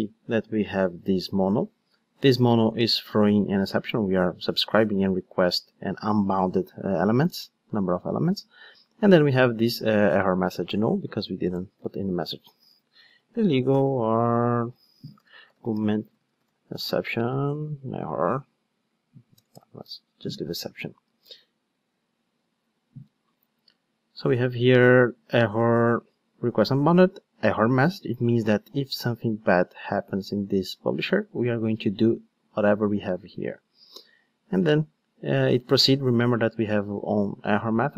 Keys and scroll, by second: 21.1 ctrl+shift+d.